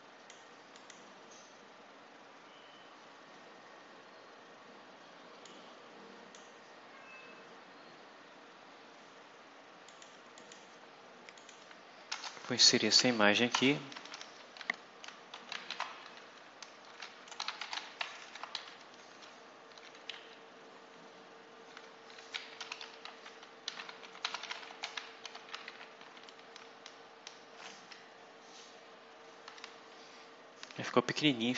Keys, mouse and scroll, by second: 0.7 click, 1.8-2.3 scroll up 2, 2.5 scroll down 2, 2.9 scroll up 2, 3.9 scroll up 2, 5.4-6.5 drag, 6.5-8.1 scroll up 8, 9.8 click, 10.3 click, 11.3 click, 12.0 Return, 12.7-14.4 typing, 15.6-18.6 typing, 19.0 ctrl+shift+v, 20.0 ctrl+Right, 21.6-26.4 typing, 27.5 d.